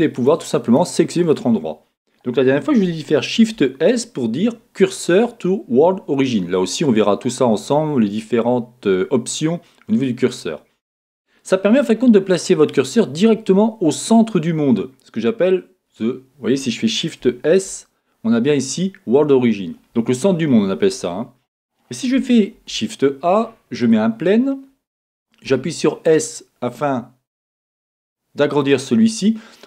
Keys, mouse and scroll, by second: 0.1 click, 0.6 click, 1.2 click, 3.4 shift+s, 11.7-28.3 middle drag, 17.5 shift+s, 22.5 shift+a, 24.4-25.4 scroll down 2, 25.4-28.3 scroll down 1, 28.3 s, 28.6 click.